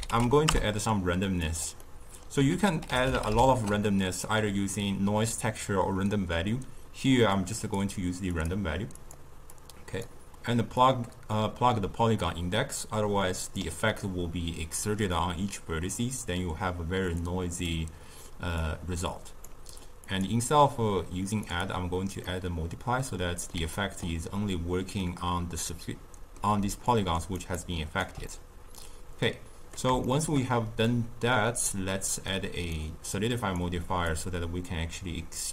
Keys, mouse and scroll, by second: 1.7 middle click, 2.4 ctrl+a, 8.9 click, 9.4-13.5 drag, 17.1-22.2 drag, 22.2-24.9 middle drag, 24.9 scroll down 2, 25.1-26.6 middle drag, 26.6 d, 26.8 click, 27.3 d, 27.3 d, 27.5 right click, 28.0 d, 28.2-32.2 middle drag, 32.2 click, 33.3 click.